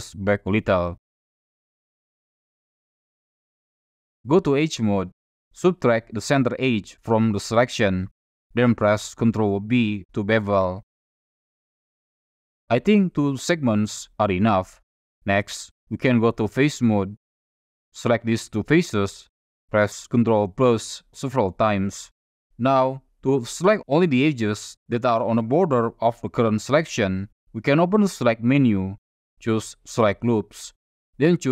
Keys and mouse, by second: 0.5 click, 1.0-3.0 middle drag, 4.1 middle click, 4.7 2, 5.6 shift+click, 8.9 ctrl+b, 14.6 click, 16.9 3, 18.1 click, 18.6 shift+click, 20.6 ctrl+KP_Add, 21.0 ctrl+KP_Add, 21.3 ctrl+KP_Add, 27.2-31.5 drag.